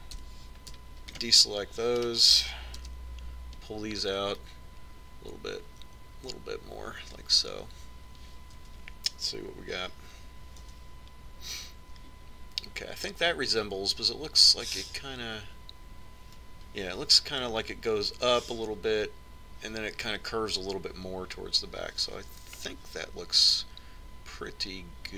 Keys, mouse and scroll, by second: 1.5 c, 3.4-5.2 right drag, 4.1 KP_1, 5.7-7.6 drag, 9.9 Tab, 12.0 z, 24.1-25.1 middle drag.